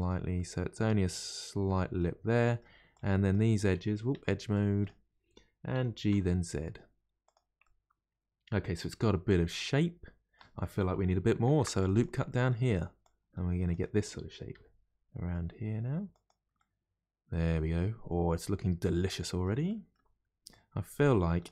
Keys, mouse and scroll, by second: 0.3-2.9 middle drag, 2.9 click, 4.1 2, 4.5 click, 5.7 g, 7.6-10.6 middle drag, 11.4 ctrl+r, 12.3 middle click, 13.0 click, 14.5 g, 16.6-19.6 middle drag, 19.6 middle click, 20.5 click.